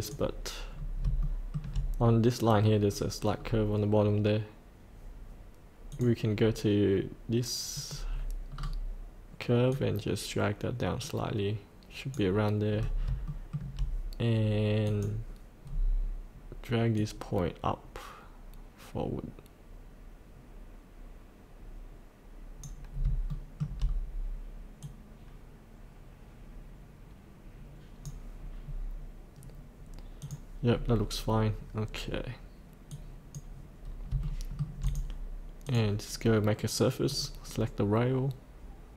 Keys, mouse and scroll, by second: 0.7-1.1 scroll down 1, 1.2 shift+middle click, 3.4-4.5 scroll down 1, 5.9 click, 8.5-9.7 scroll down 2, 9.7-12.7 drag, 12.8 scroll up 1, 13.3 shift+middle click, 14.8 click, 17.0-22.9 drag, 22.9 scroll up 1, 23.3 shift+middle click, 23.8-24.8 scroll down 1, 24.8-28.0 drag, 28.6-30.2 scroll up 1, 30.2 click, 30.7 scroll up 1, 32.9 click, 33.2 scroll up 1, 34.2 shift+middle click, 34.8-38.2 drag.